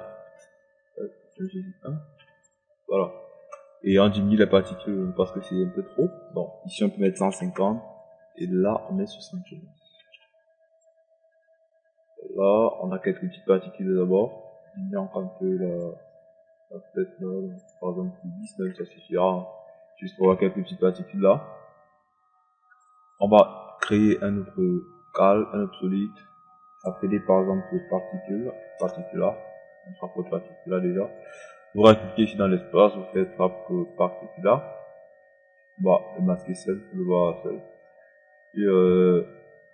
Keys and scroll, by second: 6.7 1, 7.0 KP_5, 7.3 KP_0, 9.5 KP_7, 9.8 KP_5, 18.8 KP_0, 28.5 Return.